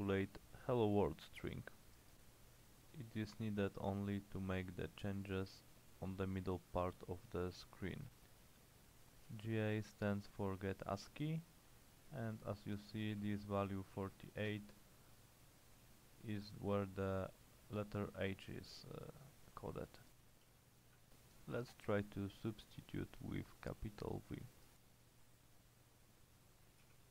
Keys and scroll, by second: 9.1-10.0 typing, 13.1 Return, 14.3-15.1 typing, 20.5 /, 21.6 shift+h, 21.9 Return, 26.9-27.1 typing.